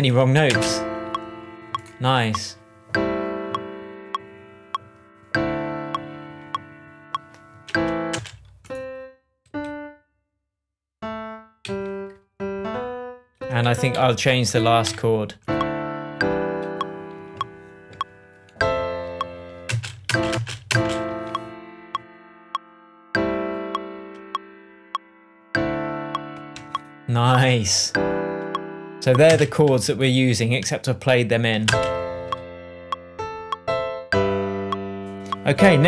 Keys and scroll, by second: 0.4 super+space, 8.0 space, 9.4 Up, 11.6 Down, 12.4 alt+Down, 13.3 alt+Up, 13.6 Down, 13.9 Left, 14.8 Delete, 19.6 space, 26.5 shift+Tab, 29.2 space, 31.6 space.